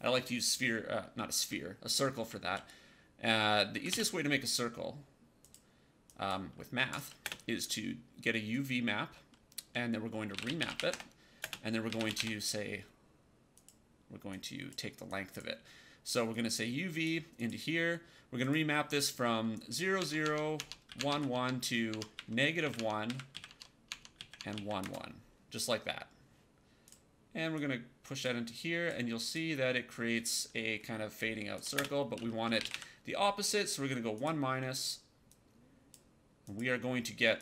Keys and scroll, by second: 3.4-4.3 typing, 7.1 space, 9.9-12.6 typing, 19.9 Tab, 20.8 KP_1, 20.9 Tab, 21.0 KP_1, 21.2 Tab, 22.1 KP_Subtract, 22.5 KP_1, 22.7 Tab, 23.0 KP_Subtract, 23.2 KP_1, 23.4 Tab, 24.1 KP_1, 24.3 Tab, 24.4 KP_1, 24.7 Return, 31.7-33.1 typing.